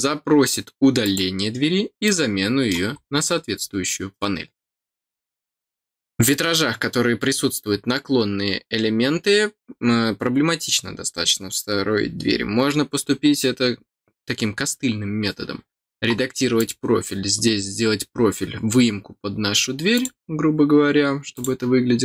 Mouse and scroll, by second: 1.0 click, 2.0 middle click, 2.9 scroll up 2, 16.5 click, 19.9 click, 21.3 click.